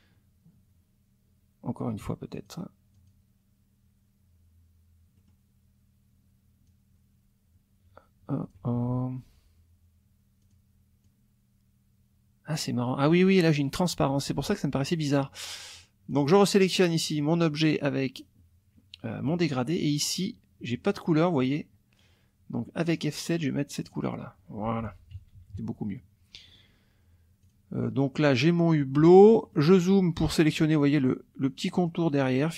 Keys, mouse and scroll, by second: 2.4 click, 2.9 click, 5.2 click, 6.7-8.7 drag, 8.7 ctrl+z, 10.4 click, 11.0-13.2 drag, 14.3 ctrl+z, 16.1 click, 17.1 click, 19.9 click, 22.9 click, 23.8 click, 24.8 F1, 25.2 KP_Subtract, 26.5 click, 27.4 click, 29.1 click, 29.4 click, 30.9 click, 31.8 click.